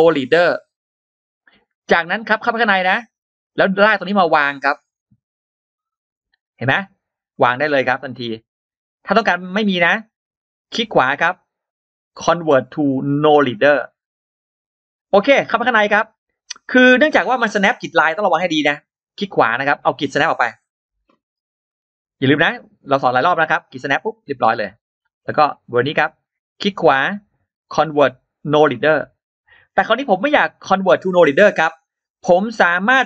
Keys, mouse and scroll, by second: 0.6 click, 1.8 click, 2.0 click, 2.5 click, 2.7 click, 3.3-7.1 drag, 7.4 click, 7.8-8.1 scroll down 2, 9.1 middle click, 9.1-9.9 scroll up 2, 9.6 middle click, 10.6 right click, 13.6 click, 15.2 click, 15.3 click, 16.6 scroll down 2, 17.4-17.7 scroll down 2, 17.7 click, 18.1-18.5 scroll up 2, 18.9 right click, 21.3 click, 21.7 click, 22.2-23.9 drag, 24.1 click, 24.4-24.8 scroll down 2, 25.0-25.3 scroll up 2, 25.6 click, 26.1 right click.